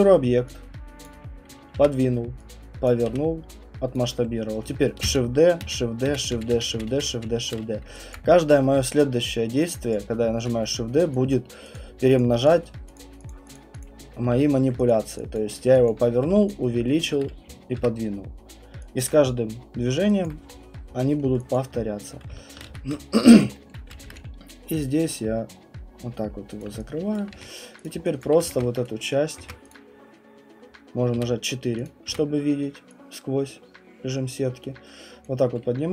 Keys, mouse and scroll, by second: 1.0 click, 1.7 e, 2.9 click, 3.1 r, 3.9 click, 5.0-7.1 typing, 7.5-8.3 scroll, 8.1 alt+click, 8.5 shift+middle click, 8.5 middle click, 9.9 alt+click, 11.3 click, 11.7 click, 12.2 click, 12.3 alt+click, 12.4 click, 12.6 alt+click, 12.9 click, 13.1 alt+click, 13.3 click, 13.5 click, 13.8 click, 14.3 q, 14.9 alt+click, 15.3 click, 15.3 alt+right click, 16.1 scroll, 17.7 Delete, 20.5-20.9 scroll, 21.2-22.6 alt+middle click, 22.1 click, 22.7 Delete, 22.7 w, 23.4 alt+click, 23.7 middle click, 24.1 ctrl+d, 26.6 click, 27.3 q, 27.8 click, 28.2 click, 29.3 ctrl+1, 29.3 right click, 29.4 ctrl+1, 29.7 click, 31.1 4, 31.8 click, 32.1 w, 35.2 click, 35.7-35.9 typing.